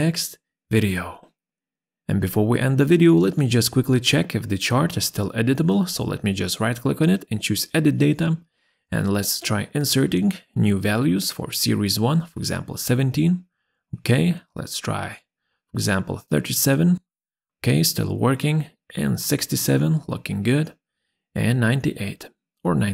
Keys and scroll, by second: 0.2 Escape, 11.5 1, 11.5 7, 12.3 Return, 15.2 3, 15.2 7, 16.0 Return, 18.2 6, 18.3 7, 18.9 Return, 21.5 9, 21.6 7, 22.4 Return.